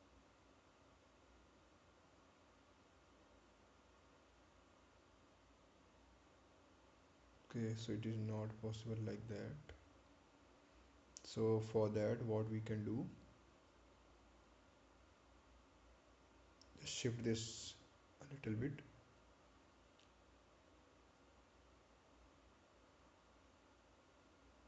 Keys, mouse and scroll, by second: 16.1 click.